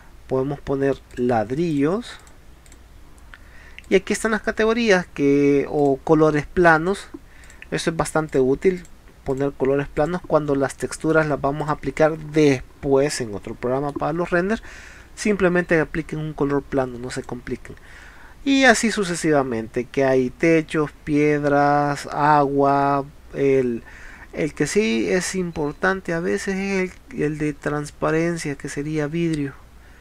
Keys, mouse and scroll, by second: 1.1 click, 1.7 click, 2.2 click, 2.7 click, 3.9 click, 5.8 click, 7.5 click, 8.3 click, 8.8 click, 9.3 click, 10.0 click, 10.8 middle click, 11.7 click, 13.1 middle click, 23.4 scroll down 1, 28.7-29.4 scroll down 1.